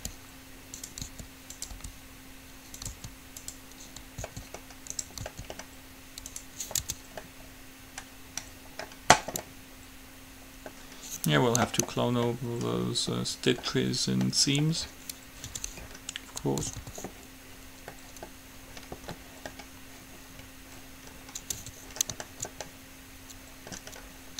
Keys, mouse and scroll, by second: 0.0-0.1 typing, 1.2-3.0 drag, 1.3 r, 1.9 g, 3.0 s, 4.5 s, 5.5 s, 7.0 Tab, 7.5-9.8 middle drag, 15.7 Tab, 16.9 a, 17.0 a, 21.0 middle click, 21.8 Tab.